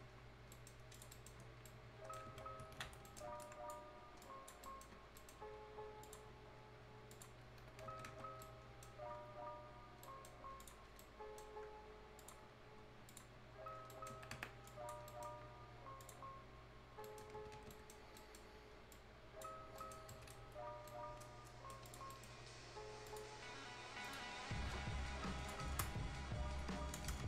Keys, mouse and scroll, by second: 0.4 scroll down 1, 0.5 right click, 0.8 scroll up 1, 0.9 click, 1.1 right click, 2.9 alt+scroll up 1, 3.0 right click, 3.4 click, 4.6 right click, 4.9 scroll up 1, 5.2 right click, 6.0 click, 6.3-6.6 scroll up 1, 7.1 click, 7.4-7.9 scroll up 1, 7.9 Escape, 8.2 scroll down 1, 8.4 right click, 9.0-9.6 scroll up 1, 10.0 right click, 10.6 click, 10.8 scroll down 1, 11.0 right click, 12.2 click, 12.4-13.1 scroll up 1, 13.1 click, 13.7-14.2 scroll down 2, 13.9 right click, 14.2 Escape, 14.4 scroll up 1, 14.7 click, 15.1 right click, 16.0 click, 16.3 scroll up 1, 17.0 right click, 17.2 scroll down 1, 17.4 Escape, 17.5 scroll up 1, 17.6 Escape, 17.7 right click, 18.0 scroll down 1, 18.2 right click, 18.5-18.8 scroll up 1, 18.9 click, 19.6 scroll up 1, 19.8 right click, 20.0 scroll down 1, 20.1 right click, 20.4 Delete, 20.5 scroll up 1, 20.9 right click, 21.9 click, 22.1 right click, 22.1 right click, 23.1 click, 27.0 BackSpace.